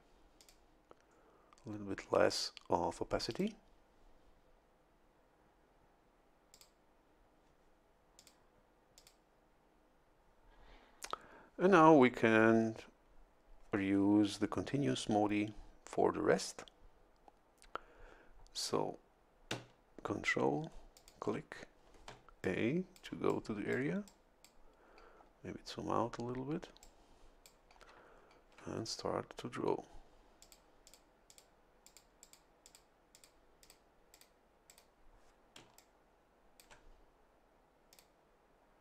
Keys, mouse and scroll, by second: 0.4 click, 3.3 click, 6.5 click, 8.2 click, 9.0 click, 21.0 ctrl+click, 22.1 a, 22.4-24.0 drag, 24.1 click, 25.2-25.9 scroll down 2, 26.8 click, 30.4 click, 30.9 click, 31.3 click, 31.9 click, 32.2 click, 32.6 click, 33.1 click, 33.6 click, 34.1 click, 34.7 click, 35.6 a, 35.8-36.9 drag, 37.9 click.